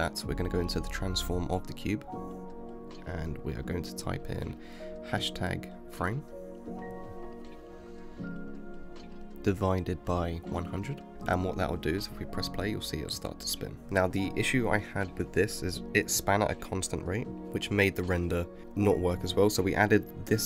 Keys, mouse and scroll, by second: 1.2-4.4 drag, 10.6 0, 12.7 space, 17.6 space, 19.1-20.4 drag.